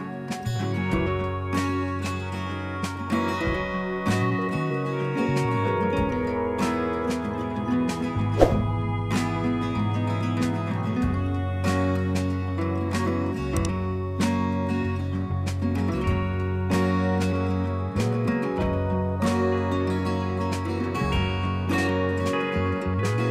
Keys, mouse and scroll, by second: 0.9 click, 12.9 click, 12.9 typing.